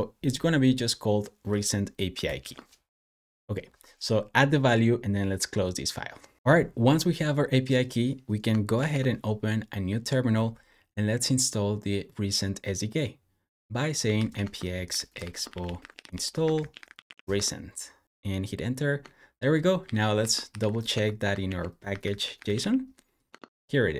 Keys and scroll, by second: 2.2 super+s, 8.7 ctrl+shift+`, 13.7-17.7 typing, 19.7 super+j, 20.0 super+p, 20.1-23.6 typing, 21.3 super+f.